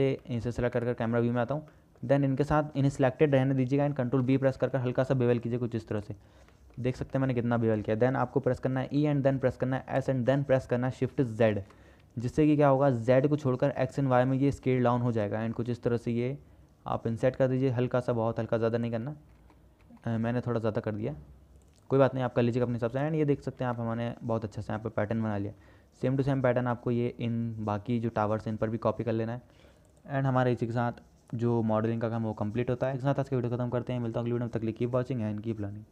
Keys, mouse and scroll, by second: 0.5 middle click, 1.0 KP_0, 2.1 shift+middle click, 2.8 shift+middle click, 4.4 ctrl+b, 6.8 shift+middle click, 7.3 shift+click, 9.1 e, 20.0 Tab, 24.0-24.3 shift+middle drag, 26.5-27.0 shift+drag, 28.3-28.7 shift+drag.